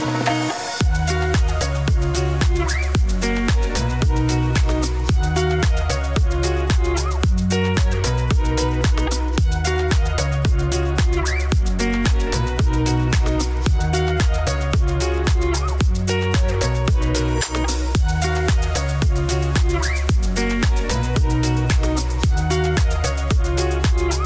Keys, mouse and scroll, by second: 0.0 click, 0.1 Tab, 0.3 scroll down 3, 0.4 middle click, 1.2 click, 1.4 shift+middle click, 1.5 Tab, 1.8 Tab, 2.7 click, 3.1 Tab, 3.7-4.2 ctrl+KP_Add, 4.7 KP_Decimal, 5.0 middle click, 5.4 ctrl+KP_Add, 5.5 ctrl+KP_Add, 6.1-7.7 drag, 8.5 click, 10.2 click, 10.2 Tab, 10.3-10.9 scroll down 7, 10.5 middle click, 11.0 middle click, 11.2 click, 14.9 click, 15.8 shift+middle click, 16.1 scroll up 6, 16.2 Tab, 16.4 click, 17.1 ctrl+KP_Add, 17.2 ctrl+KP_Add, 17.9 alt+e, 19.1 Tab, 19.4 Tab, 19.8 ctrl+KP_Add, 20.5-21.6 drag, 21.6 Tab, 21.7-22.0 scroll down 9, 22.0 middle click, 22.6 click, 23.4 click, 24.2 scroll up 1.